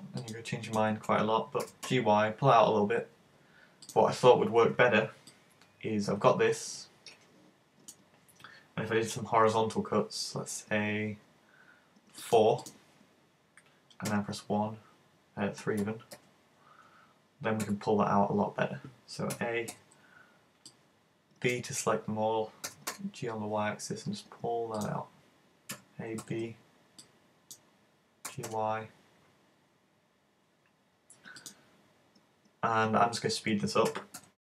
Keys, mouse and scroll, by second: 0.2 shift+right click, 0.6 shift+right click, 1.7 g, 3.9 click, 5.3 middle click, 9.4 ctrl+r, 12.3 click, 12.6 click, 14.1 KP_1, 15.8 KP_2, 16.2 KP_3, 17.7 z, 24.8 click, 25.8 a, 26.2 b, 28.3 g, 31.5 click, 34.2 b.